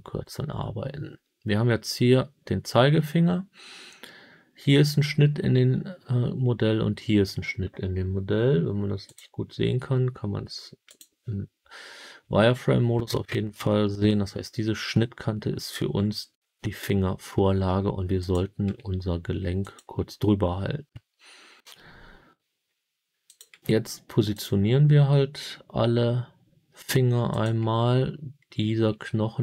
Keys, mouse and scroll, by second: 9.0 click, 10.8 click, 18.1 click, 18.6 g, 19.5 click, 23.2 click, 23.5 g, 24.3 click, 27.2 click, 28.8 g.